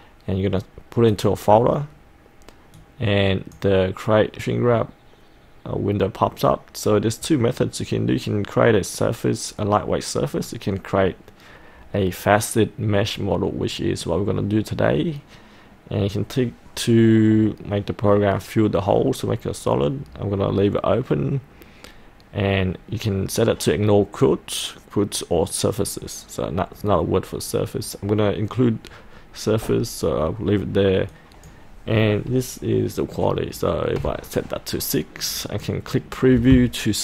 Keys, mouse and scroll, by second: 34.1 KP_6, 35.5 click.